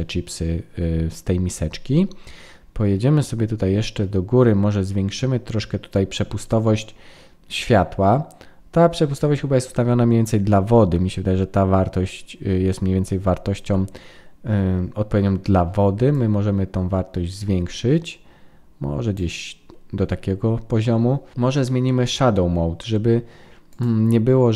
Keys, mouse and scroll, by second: 3.0-4.5 scroll up 1, 16.1 click, 23.7 click.